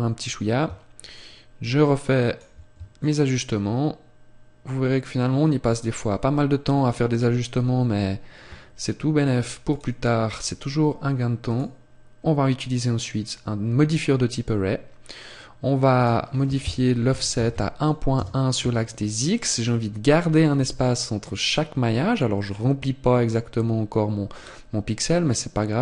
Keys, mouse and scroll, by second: 1.0 shift+click, 2.9 shift+click, 9.6 click, 15.9 click, 19.1-20.5 scroll up 2, 20.8 scroll up 2, 21.0-21.4 scroll down 3, 21.9-22.9 scroll down 3, 24.3-25.1 scroll down 1, 25.1-25.5 scroll down 2.